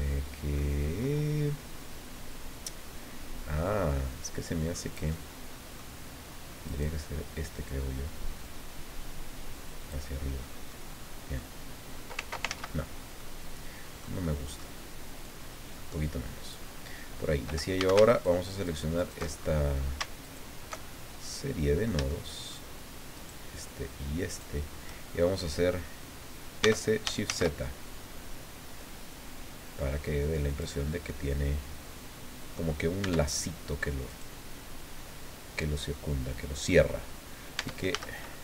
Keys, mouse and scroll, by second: 3.6-4.9 drag, 5.1 click, 6.6 right click, 7.7-10.1 drag, 10.7 middle click, 12.5 ctrl+z, 13.2-14.2 middle drag, 14.2 middle click, 15.2-16.7 drag, 17.8 a, 18.1 alt+shift+right click, 18.6 alt+shift+right click, 19.3-19.9 alt+shift+scroll up 1, 20.2 alt+shift+right click, 20.8 alt+shift+scroll down 1, 21.2 click, 22.1 shift+click, 23.1 shift+right click, 24.3 shift+right click, 26.6 s, 27.2 shift+z, 30.5 click, 30.8-31.1 scroll down 2, 31.1 click, 31.4-32.7 middle drag, 33.0 Tab, 33.5 scroll down 2, 34.1 right click, 37.6 Tab, 37.9 a.